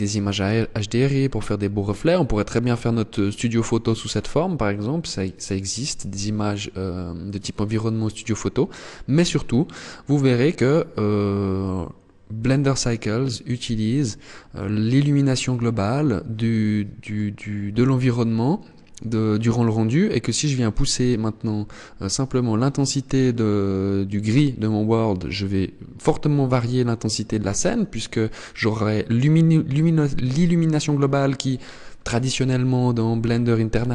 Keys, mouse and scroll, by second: 12.0 click.